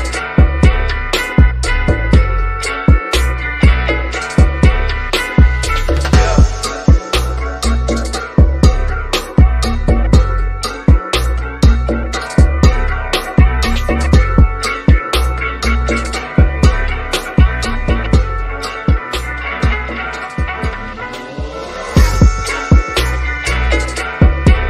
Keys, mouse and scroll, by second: 3.7 typing, 5.4 click, 9.8-10.6 scroll down 1, 10.7-12.9 shift+middle drag, 12.9 scroll down 1, 13.5 shift+middle click, 14.7 click, 16.0-16.4 scroll down 1, 16.5-18.1 middle drag, 18.1 click, 19.9 click, 21.1 click, 21.8 shift+middle click, 22.4 scroll up 1, 22.9-24.6 shift+middle drag.